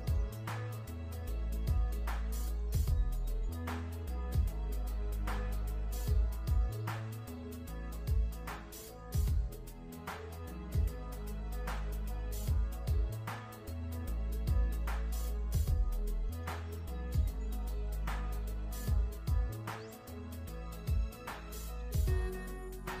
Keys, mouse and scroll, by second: 5.4 click, 13.4 click, 19.0 KP_3, 19.9 click, 22.1 click.